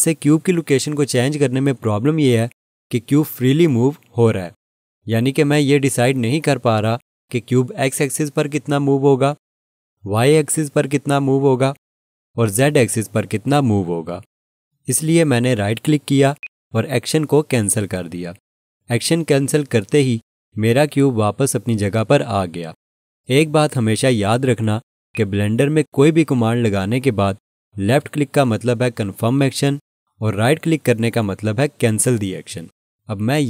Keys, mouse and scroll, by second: 16.4 right click, 25.1 click.